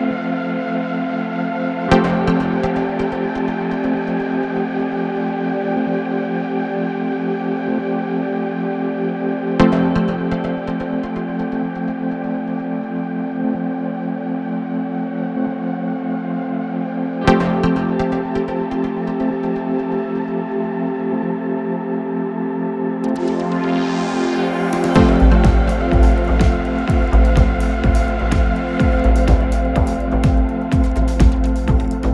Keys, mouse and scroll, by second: 0.0-0.5 right drag, 0.6 click, 1.6 click, 2.2 click, 3.9 click, 4.5 click, 5.7 click, 6.4-8.9 middle drag, 8.9 click, 10.7-13.7 drag, 14.1-16.4 middle drag, 16.4-19.4 drag, 22.3-23.7 drag, 24.5-28.3 drag, 28.8-29.3 scroll down 2, 29.8-31.0 scroll down 1, 31.8-32.1 drag.